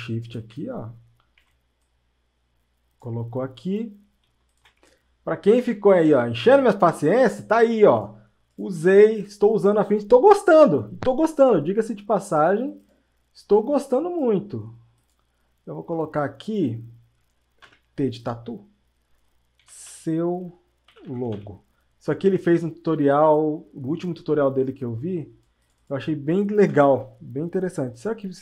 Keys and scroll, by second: 17.7 t, 20.7-21.8 typing, 26.7 ctrl+a.